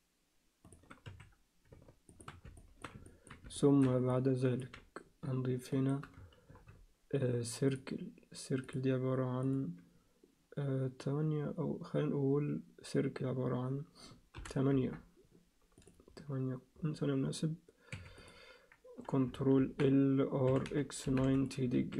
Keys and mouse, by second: 1.7 s, 2.6 alt+shift+middle click, 3.0 ctrl+alt+middle click, 3.6 shift+middle click, 4.1 ctrl+alt+middle click, 5.7 shift+right click, 6.6 shift+a, 8.6 click, 9.4-15.0 drag, 17.9 1, 18.2 click, 19.6 ctrl+l, 20.5 r, 21.8 s.